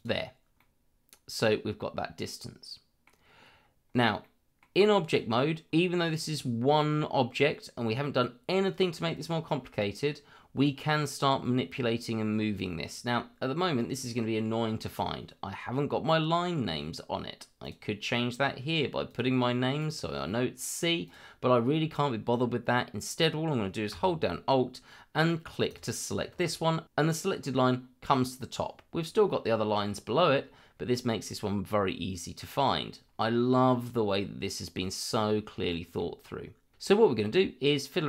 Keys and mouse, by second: 0.6-3.0 middle drag, 4.2-4.6 middle drag, 17.6 click, 19.1 click, 19.8 click, 21.0 click, 25.7 alt+click, 35.7 shift+middle click.